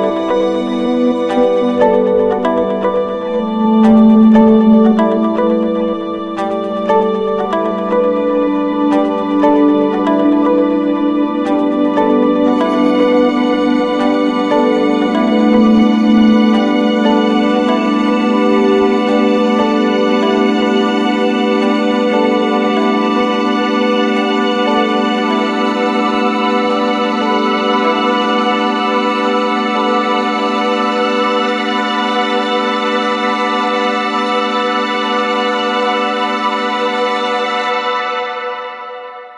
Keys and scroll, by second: 18.7 Up, 23.9 ctrl+z, 31.5 ctrl+z.